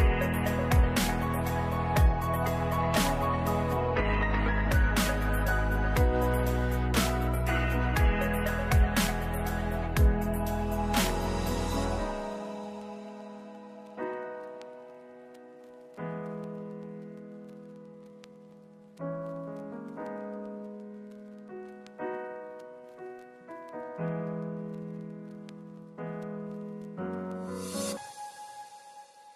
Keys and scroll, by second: 1.0 ctrl+s, 4.5 2, 4.8 5, 7.4 8, 14.9 ctrl+s, 18.0-18.9 typing, 23.5 ctrl+s, 25.9 ctrl+s.